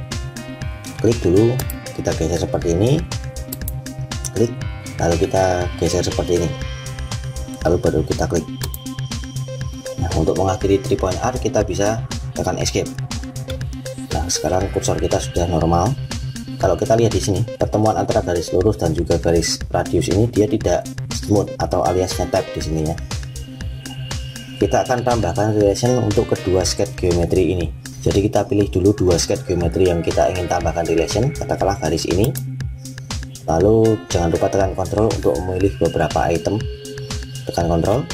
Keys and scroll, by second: 12.4 Escape.